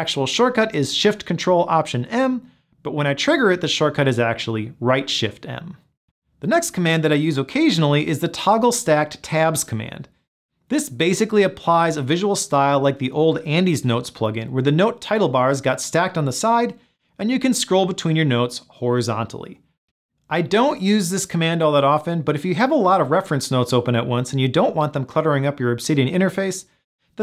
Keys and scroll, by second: 1.3 Return, 12.8 ctrl+alt+shift+t.